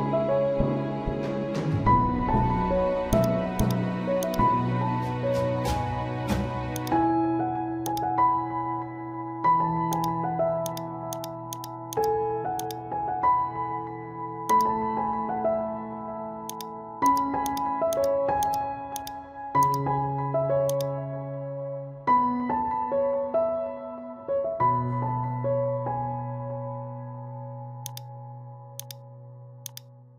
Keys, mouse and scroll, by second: 2.3-3.1 scroll down 1, 3.1 click, 6.7 click, 8.5-9.2 typing, 9.9 click, 14.1 typing, 14.5 click, 15.1-15.9 typing, 16.5 click, 21.9 ctrl+z, 26.7-27.1 typing, 27.8 click.